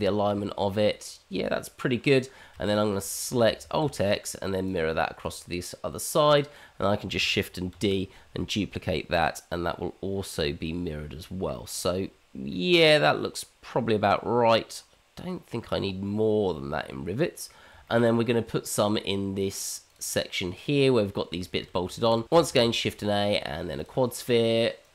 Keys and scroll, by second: 3.6 alt+x, 7.7 shift+d, 22.5 shift+a.